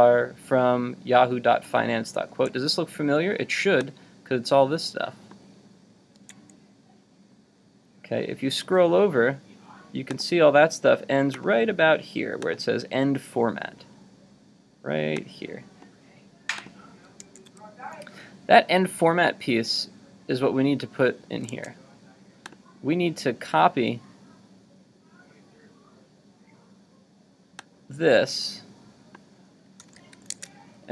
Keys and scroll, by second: 2.3 super+Tab, 6.2 super+Tab, 17.2 super+Tab, 21.5 super+Tab, 29.8 super+c, 30.4 super+Tab.